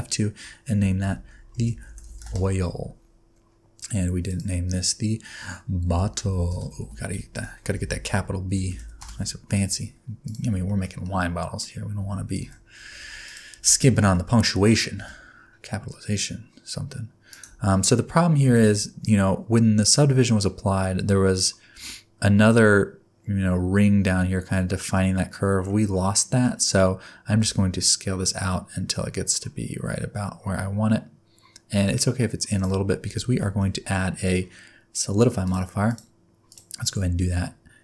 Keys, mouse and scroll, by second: 4.2 click, 5.2 F2, 8.6 t, 10.2 click, 10.6 shift+middle click, 11.0 middle click, 11.7 scroll up 3, 12.0 Tab, 12.3 alt+z, 12.9 1, 13.2 alt+click, 13.6 alt+z, 14.1 middle click, 15.0 s, 17.6 middle click, 17.9 scroll down 2, 18.4 scroll down 3, 18.5 shift+middle click, 18.7-20.7 scroll up 1, 20.7-21.0 scroll up 1, 25.5-26.1 scroll up 5, 26.1 middle click, 26.5-27.2 scroll up 2, 27.2 s, 32.8 scroll down 3, 33.0 Tab, 33.4 shift+middle click, 33.6-34.0 scroll down 2, 34.0-35.4 scroll up 2, 35.4 click, 35.8 click, 36.4 click.